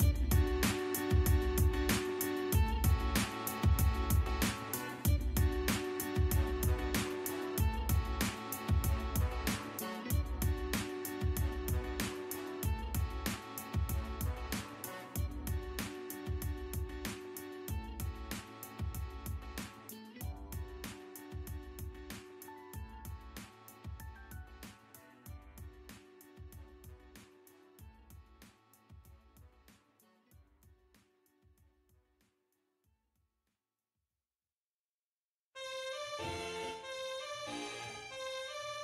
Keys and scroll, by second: 0.8 e, 0.9 space, 10.7-12.5 typing, 12.8 Return, 16.7 Escape, 38.4 e, 38.5 space.